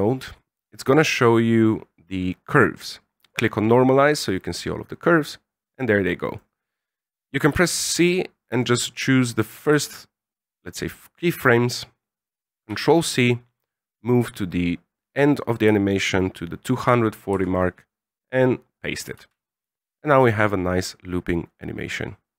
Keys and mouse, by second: 3.2 click, 4.4 middle click, 4.9 middle click, 6.2 right click, 7.5 c, 12.6 ctrl+c, 13.0 middle click, 13.9-15.2 drag, 17.3 ctrl+v, 18.1-18.8 middle drag, 19.1 alt+a.